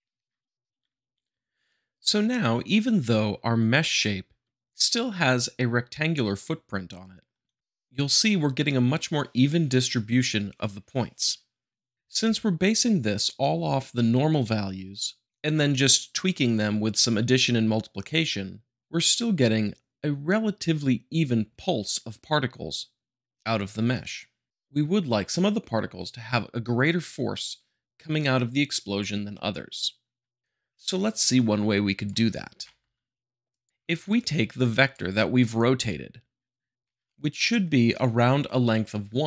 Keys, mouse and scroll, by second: 5.0 `, 7.4 middle click, 32.5 g, 32.6 middle click, 33.5 click, 34.1-35.2 drag.